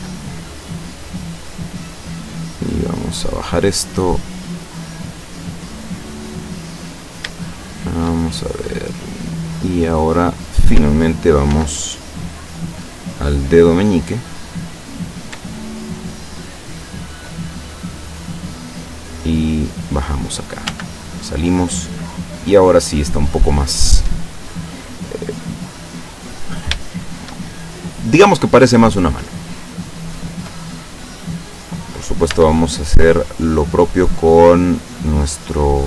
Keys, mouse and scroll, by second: 0.3-1.8 shift+middle drag, 2.5-4.9 drag, 5.0 middle click, 6.0-6.4 scroll down 2, 6.4-7.5 middle drag, 8.6-9.7 middle drag, 9.8 middle click, 11.6 ctrl+r, 13.0 click, 14.3 click, 15.0 right click, 15.7 shift+right click, 17.0 shift+right click, 17.4 shift+middle click, 18.3-18.8 scroll up 1, 18.8-20.0 drag, 20.0 scroll up 1, 20.1-20.8 middle drag, 20.7 Tab, 21.1-23.4 middle drag, 23.9 scroll down 1, 24.7-25.6 middle drag, 26.0-26.8 middle drag, 26.9-27.4 shift+middle drag, 27.5-30.7 shift+middle drag, 32.4 Tab, 33.5 middle click, 34.5-35.7 middle drag.